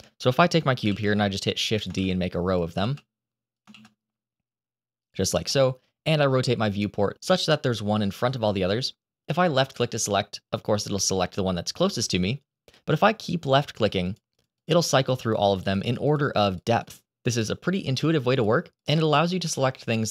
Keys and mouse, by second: 0.8 shift+d, 1.8 shift+d, 2.8 shift+d, 3.4 click, 3.7 shift+d, 4.9 click, 5.4-7.1 middle drag, 13.4 click, 14.0 click, 14.5 click, 14.6 click, 14.9 click, 15.3 click, 15.5 click, 15.7 click, 15.9 click, 16.4 click, 16.6 click, 18.3 click, 18.7 click.